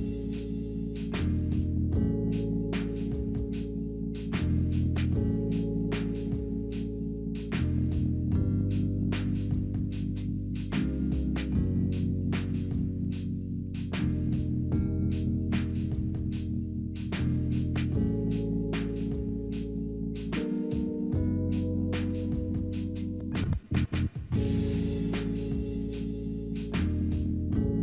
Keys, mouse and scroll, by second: 0.1-1.0 typing, 2.1 middle click, 2.5-4.1 typing, 2.7 alt+middle click, 3.0 scroll down 4, 3.9-4.5 scroll down 22, 4.7 alt+middle click, 5.4 scroll down 2, 5.6 middle click, 6.0 alt+middle click, 6.4 alt+middle click, 8.3 scroll up 1, 10.5 scroll down 2, 12.9 double click, 13.0-13.9 typing, 18.6 double click, 18.6-19.7 typing, 21.2 scroll up 2, 21.7 scroll down 2, 22.2 middle click, 22.7 middle click, 23.8 shift+click, 27.2 scroll up 2, 27.7 scroll down 2.